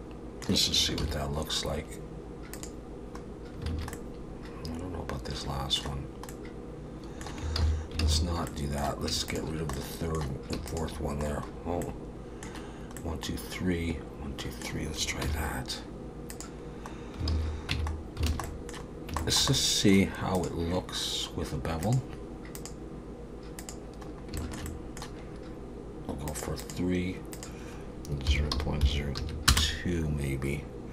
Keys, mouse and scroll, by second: 1.0 ctrl+e, 3.2-3.7 scroll down 3, 3.7 alt+a, 3.9 middle click, 6.0 scroll down 1, 6.3 middle click, 7.6 ctrl+z, 8.0 ctrl+z, 8.5 middle click, 9.3 shift+click, 9.7 middle click, 10.7 shift+click, 11.5-11.8 scroll up 2, 11.8 middle click, 13.0 middle click, 15.2 ctrl+e, 16.9 scroll down 2, 17.3 alt+a, 17.7 Tab, 17.9 scroll down 3, 18.3 alt+a, 18.4 middle click, 18.9 scroll down 2, 19.2 shift+middle click, 19.5 middle click, 20.4 click, 21.8 click, 22.6 click, 24.1-24.4 scroll up 3, 24.4 shift+middle click, 26.3 click, 26.6 click, 27.3 click.